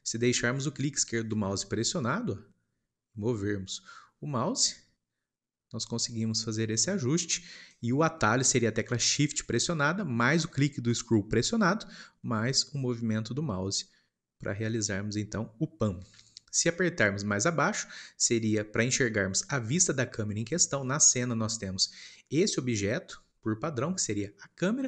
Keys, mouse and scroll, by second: 1.4-4.2 drag, 11.6-14.5 shift+middle drag, 20.7-23.2 shift+middle drag, 23.2 scroll down 1, 23.3 scroll up 1, 23.4-24.8 middle drag.